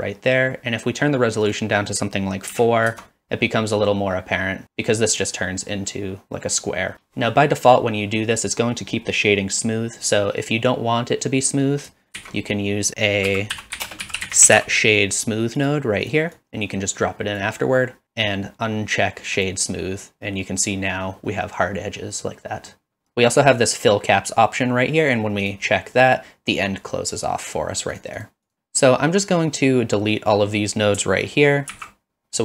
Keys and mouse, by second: 1.6-3.3 drag, 12.2 shift+a, 16.4-17.4 drag, 19.4 click, 21.2-22.7 middle drag, 25.4 click, 27.9 click, 28.2 click, 28.5 click, 28.9-30.5 drag, 31.7 ctrl+x.